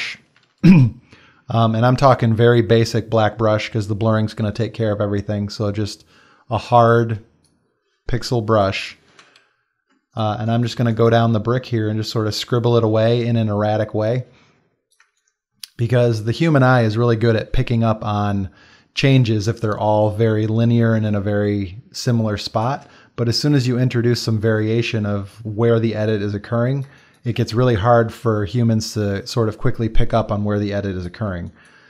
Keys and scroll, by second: 0.2 b, 9.1 x, 10.0 ctrl+space, 15.0 space, 22.3 space, 26.9 space, 31.3 space.